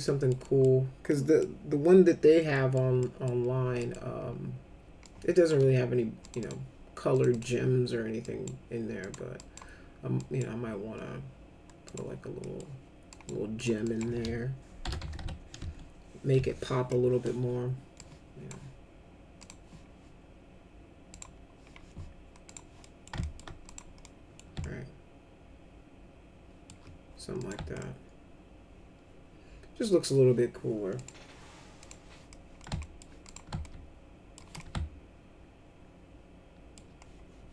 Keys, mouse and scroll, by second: 0.0 middle click, 0.4 middle click, 1.0 middle click, 2.5 middle click, 2.9 middle click, 3.7 middle click, 5.0 shift+click, 6.2 click, 6.4 click, 7.1 click, 7.3 click, 8.2 click, 9.0 click, 9.3 click, 10.1 click, 11.8 click, 12.4 middle click, 13.1 click, 13.5 click, 13.8 click, 14.6-15.7 typing, 16.3 Return, 17.9 click, 19.4 click, 21.1 click, 22.4 click, 22.8 middle click, 23.2 alt+middle click, 23.6 click, 24.0 middle click, 24.6-26.6 alt+shift+middle drag, 27.3 click, 27.8-29.8 alt+middle drag, 30.9 click, 31.8 click, 32.2 middle click, 32.8 alt+middle click, 33.2 click, 33.6 alt+shift+middle click, 34.5-36.7 alt+middle drag.